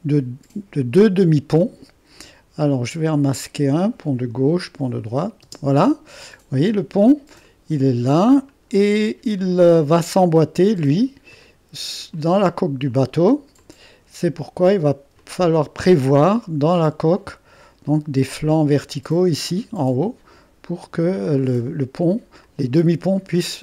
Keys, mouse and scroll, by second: 0.3-2.0 drag, 5.0 click, 5.4 space, 6.2 click, 7.3 click, 8.7-9.6 scroll up 1, 10.2-11.4 drag, 11.4 middle click, 12.4 click, 15.2 click, 15.5 click, 16.4 click, 17.2 click, 17.9-20.4 middle drag, 21.6 click, 22.5 click, 23.3-23.6 drag.